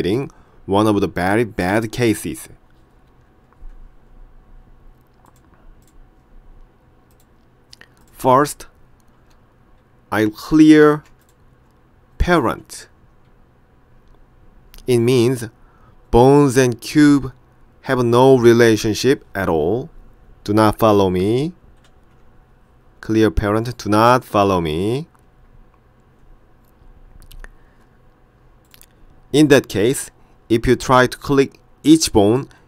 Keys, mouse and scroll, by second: 5.3 click, 7.2 click, 11.3 shift+click, 21.8 alt+p, 28.7 click.